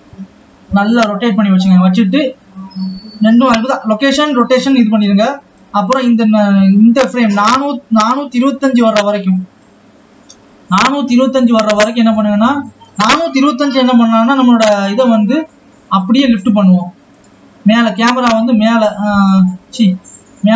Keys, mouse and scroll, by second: 3.6 i, 5.9 click, 18.2-20.5 drag.